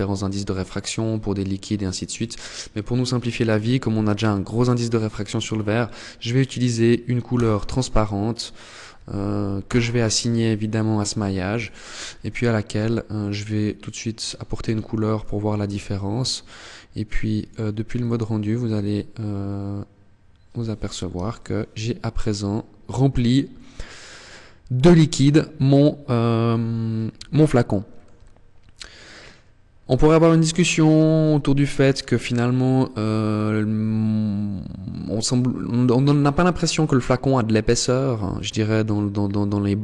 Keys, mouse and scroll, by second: 1.4 click, 8.8 click, 10.7 click, 14.9 Tab, 16.5 click, 19.9 KP_0, 25.6 scroll up 1, 26.3 shift+middle click, 27.5 scroll up 1, 29.2 scroll up 1, 30.3 shift+middle click.